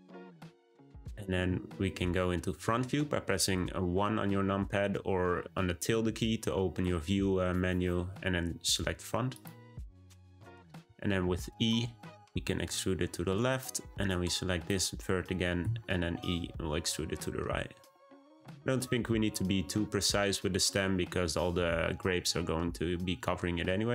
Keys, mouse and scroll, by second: 11.8 e, 14.0 click, 15.6 e.